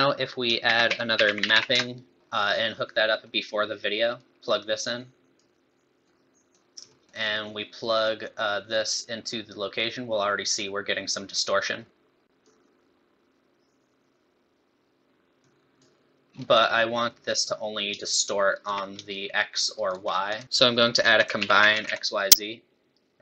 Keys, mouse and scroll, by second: 0.1 scroll up 2, 0.6 shift+a, 1.5 p, 2.2 middle click, 3.2 middle click, 4.2 click, 6.0 middle click, 6.9 middle click, 8.0 click, 11.5-11.9 scroll up 5, 11.9 middle click, 11.9 scroll down 1, 12.4 click, 15.0 middle click, 15.0-15.4 scroll down 3, 15.4 click, 16.3 scroll up 5, 17.1 middle click, 17.9 shift+click, 19.1 shift+click, 20.3 click.